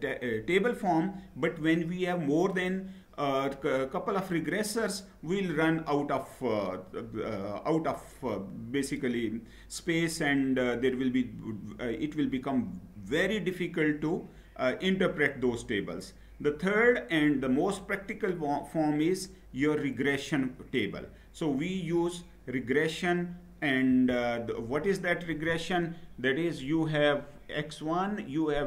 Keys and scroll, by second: 23.7 Down.